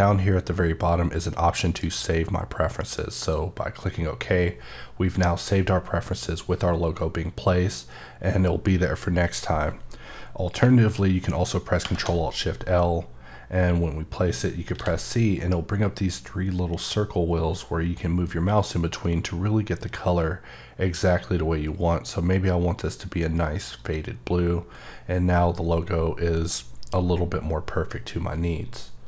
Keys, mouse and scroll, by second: 1.6 click, 3.2 click, 11.8 l, 14.7 c, 18.7 typing, 23.7 click.